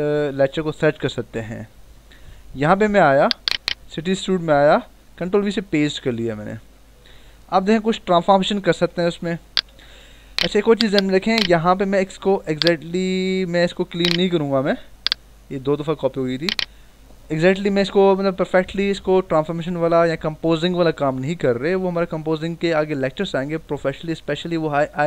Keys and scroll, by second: 4.7 ctrl+v, 6.5 -, 7.4 ctrl+-, 9.3 v.